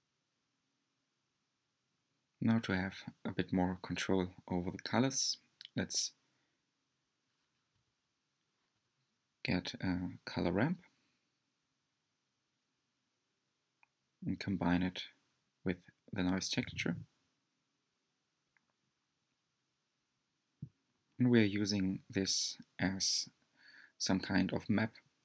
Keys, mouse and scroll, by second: 6.4 click, 7.0 ctrl+shift+click, 16.5 drag.